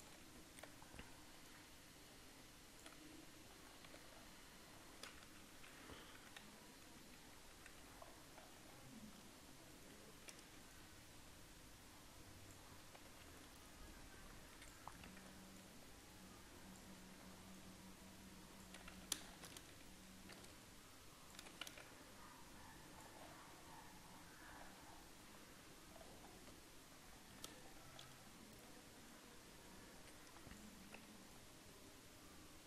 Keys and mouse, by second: 1.4-5.6 right drag, 2.2-4.1 drag, 4.1 Tab, 5.3-7.7 typing, 8.6 Tab, 9.8-11.5 right drag, 10.4 a, 11.5 middle click, 12.5-13.9 drag, 17.2 click, 17.2 right click, 17.2 a, 18.0 click, 19.0 z, 19.4-21.3 middle drag, 19.7 a, 20.4 c, 22.3-24.3 drag, 23.7 Tab, 24.3 middle click, 24.8 Tab, 26.0 middle click, 26.8 middle click, 27.9-29.0 middle drag, 29.0 right click, 29.7-31.0 middle drag, 31.0 click, 31.0 a, 31.3-32.6 middle drag.